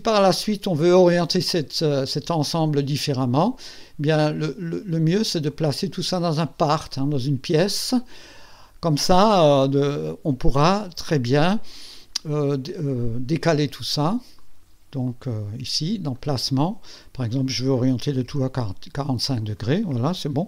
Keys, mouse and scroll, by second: 1.8 scroll down 1, 5.5 click, 8.3 click, 13.0-13.3 scroll up 1, 14.4 click, 16.1 click, 16.9 click, 18.1 KP_4, 18.3 KP_5.